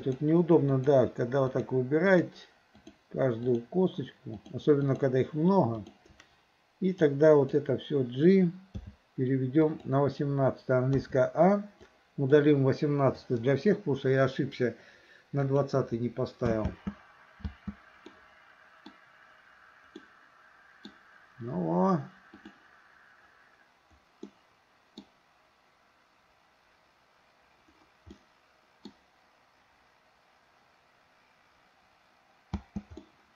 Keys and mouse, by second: 0.0 shift+click, 0.7 shift+click, 1.5 shift+click, 2.1 shift+click, 2.9 shift+click, 3.5 shift+click, 4.4 shift+click, 4.9 shift+click, 5.9 shift+click, 7.0-7.5 drag, 8.7 g, 11.0 a, 12.0-12.3 drag, 13.2 Delete, 15.5 click, 16.6 space, 18.2-19.0 middle drag, 20.0-21.0 middle drag, 22.5 click, 24.3-25.1 middle drag, 28.2-29.0 middle drag, 32.6 space, 33.0-33.3 middle drag.